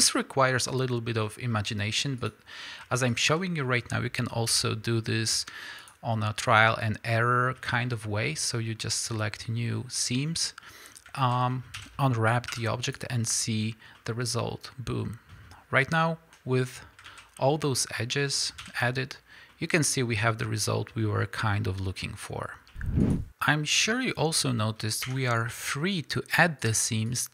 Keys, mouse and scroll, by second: 2.2 click, 3.2 shift+click, 3.6 middle click, 5.9 ctrl+e, 6.3 middle click, 10.0-11.8 middle drag, 11.3 alt+a, 11.8 a, 12.9 u, 17.1 alt+a, 17.4-18.6 middle drag, 18.6 a, 22.7 middle click, 23.0 drag, 24.2-24.7 middle drag, 25.0 Tab, 25.5 middle click, 26.6 click, 27.1 click.